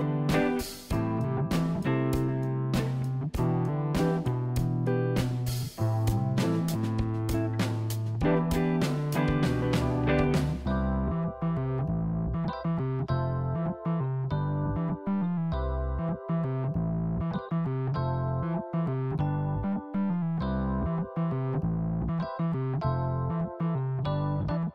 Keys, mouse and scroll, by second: 1.7 s, 3.3 s, 5.2-6.3 middle drag, 6.3 Tab, 7.0 click, 8.4 KP_1, 9.5 e, 13.1 click, 15.2 click, 15.9 Tab, 16.0 click, 16.3 click, 17.1 click, 21.4 click, 23.5 click.